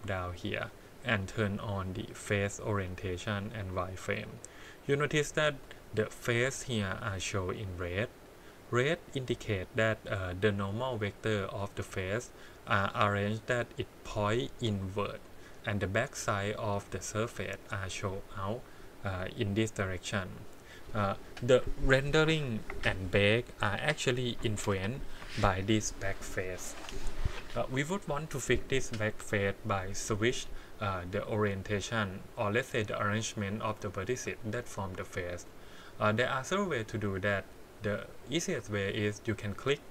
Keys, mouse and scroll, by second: 5.4 scroll up 2, 6.2 click, 7.5 click, 9.2-11.9 drag, 16.8 click, 17.7 click, 34.4 click, 35.2 click, 37.1 middle click, 38.5 Tab, 38.9 click.